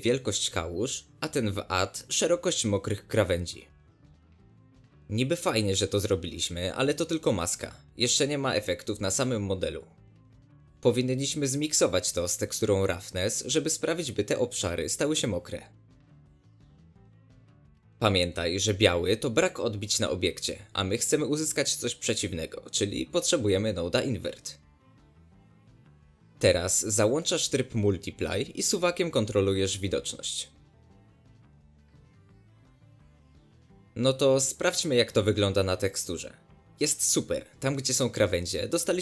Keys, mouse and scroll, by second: 17.1 click, 19.3 ctrl+shift+click, 20.8-21.1 ctrl+shift+drag, 25.4 shift+a, 29.8-36.2 drag, 37.6 middle click, 37.9 scroll up 1, 38.0-39.0 middle drag.